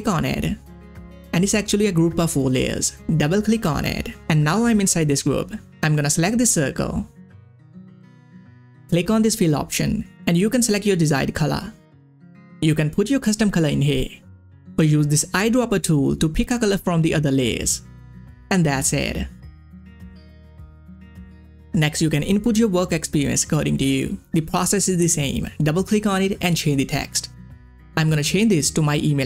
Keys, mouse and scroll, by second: 3.0 click, 6.6 click, 7.6 ctrl+scroll up 1, 9.6 click, 12.5 click, 19.3 ctrl+scroll down 1, 20.9 scroll up 1, 24.3 scroll up 1, 24.4 scroll down 1, 25.0 ctrl+scroll up 1, 25.9 ctrl+scroll up 1, 27.7 click, 28.8-29.2 typing.